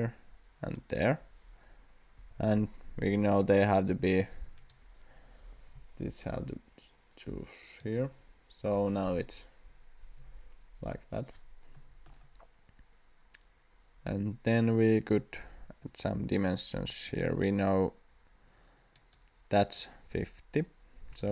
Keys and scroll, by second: 2.2 Escape, 16.9 Escape, 21.1 d.